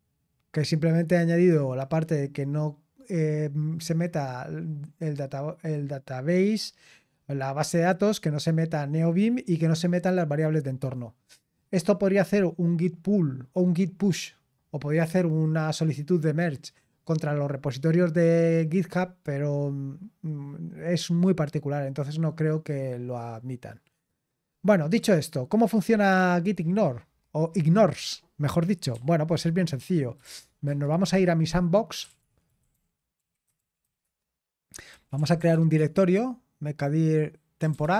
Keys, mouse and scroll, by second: 0.7-2.2 scroll down 1, 2.2-4.9 scroll down 1, 4.9-6.2 scroll down 1, 6.2-9.9 scroll down 1, 9.9-10.8 scroll down 1, 10.8-13.5 scroll down 1, 13.5-14.0 scroll down 1, 18.4-20.1 scroll up 1, 20.1 scroll up 1, 20.3-21.1 scroll down 1, 21.1-23.9 scroll down 1, 23.9-24.9 scroll down 1, 24.9 click, 26.7-28.9 scroll down 1, 28.9-30.7 typing, 31.7-36.0 typing, 37.3-37.9 typing.